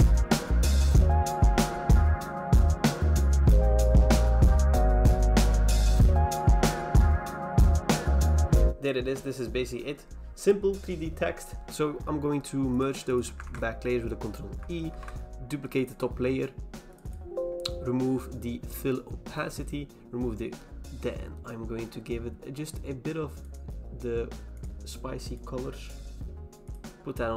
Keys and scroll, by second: 0.2 alt+BackSpace, 0.3-1.0 typing, 1.2 alt+BackSpace, 1.4 ctrl+d, 1.7 alt+BackSpace, 1.8 ctrl+d, 2.3 alt+BackSpace, 2.5 ctrl+d, 3.8 alt+BackSpace, 3.8 ctrl+d, 4.4 ctrl+d, 4.4 alt+BackSpace, 7.3 alt+BackSpace, 7.3 ctrl+d, 7.4 ctrl+z, 7.5 ctrl+z, 11.6 v, 13.4 ctrl+e, 14.9 ctrl+j.